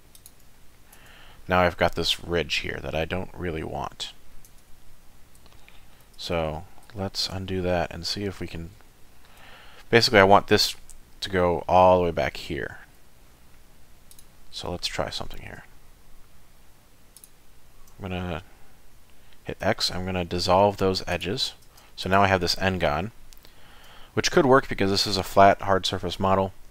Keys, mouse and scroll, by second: 0.6 middle click, 1.0 Tab, 1.3-2.8 scroll down 2, 3.4 middle click, 4.5 Tab, 5.6 ctrl+z, 6.5 ctrl+z, 6.9 ctrl+z, 7.6 middle click, 8.1-8.8 scroll up 2, 8.9 shift+middle click, 9.5 middle click, 12.5 shift+middle click, 14.1 click, 17.2 shift+click, 19.6 x, 22.0 click, 23.1 shift+middle click.